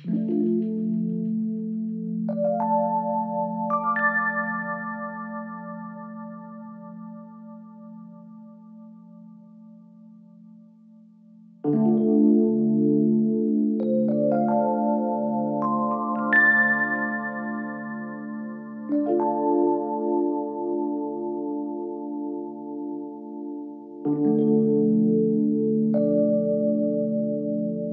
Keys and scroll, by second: 2.5 3, 3.0 ], 4.5 3, 12.5 3, 22.5 Delete, 23.3 Delete.